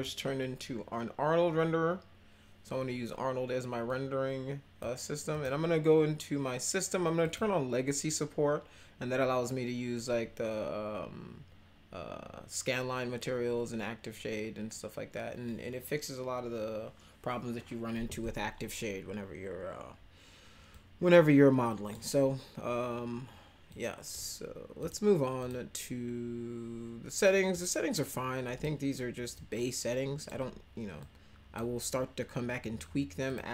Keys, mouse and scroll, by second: 3.8-4.8 drag, 5.3 click, 7.2 click, 20.7-21.9 drag, 23.7 click, 24.8 click, 25.4 click, 27.5-28.6 drag, 29.3 click, 31.0 click, 33.2 click.